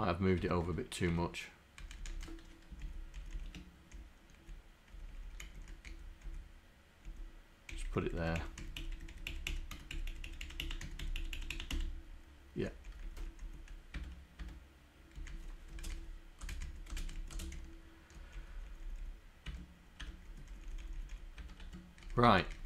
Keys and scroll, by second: 0.5 Tab, 1.1 Tab, 1.8 Up, 2.2 Up, 2.9 shift+Down, 3.4 shift+Left, 4.0 shift+Left, 5.1 Right, 5.6 Down, 5.9 Up, 7.1 Left, 7.7 Delete, 8.0 Delete, 8.6 Down, 9.2 Delete, 9.5 Delete, 9.8 Down, 10.5 Delete, 10.7 Delete, 10.9 Down, 11.1 Delete, 11.4 Delete, 12.6 Down, 12.9 Left, 13.5 Down, 15.4 Down, 15.8 space, 15.9 Up, 16.0 Down, 16.5 space, 16.6 Up, 16.7 Down, 17.0 Up, 17.3 Down, 18.5 Down, 19.0 Down, 19.5 Tab, 20.1 Tab, 20.3 Down, 20.9 Left, 21.2 Left, 21.4 Tab, 21.6 Tab, 22.1 Up, 22.6 Up.